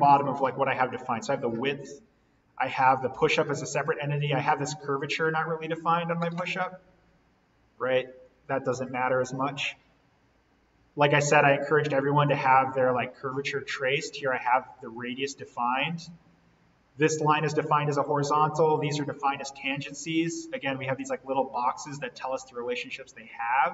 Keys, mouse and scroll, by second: 0.7 click, 1.9-2.5 scroll up 1, 2.5-3.0 scroll down 1, 6.4-8.8 drag, 8.8 z, 9.5-10.0 scroll up 1, 10.4-10.9 scroll down 1, 13.7-14.3 scroll up 1, 14.9 click, 15.9-16.4 scroll down 1, 17.3 click, 20.4-20.8 scroll down 1, 22.7-23.1 scroll up 1.